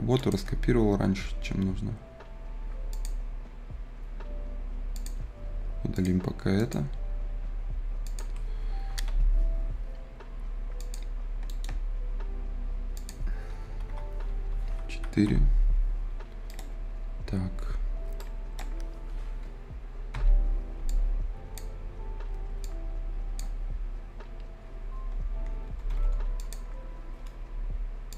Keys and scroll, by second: 1.4 Escape, 9.1 Delete, 13.5 `, 13.7 Return, 13.8 `, 13.9 Return, 14.4 d, 14.9 Return, 20.0 F10, 25.6 Escape.